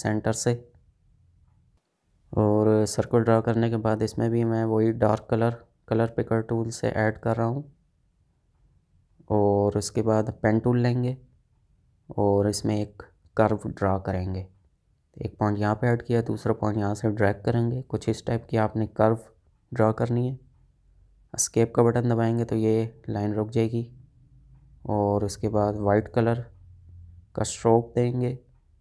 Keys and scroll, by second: 22.4 Escape.